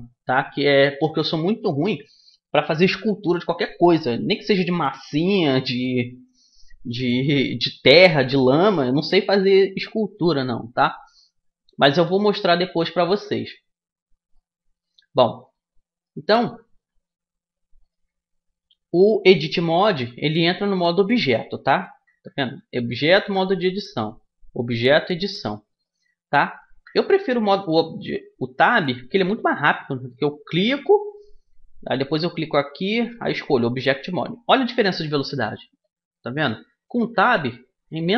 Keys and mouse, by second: 14.1-15.1 middle drag, 15.1 right click, 16.0-17.5 middle drag, 17.5-19.0 drag, 19.0 middle click, 19.3 Tab, 20.0 Tab, 20.3 Tab, 20.7 Tab, 21.1 Tab, 21.7 Tab, 22.9 Tab, 23.6 Tab, 24.3 Tab, 24.7 Tab, 26.4 Tab, 26.7 Tab, 27.1 Tab, 27.5 Tab, 28.4 Tab, 29.1 Tab, 30.4-31.7 drag, 33.3 click, 34.9 Tab, 36.1 Tab, 36.5 Tab, 36.7 Tab, 36.9 Tab, 37.1 Tab, 37.3 Tab, 37.3 middle click, 37.6 Tab, 37.8 Tab, 38.0 Tab.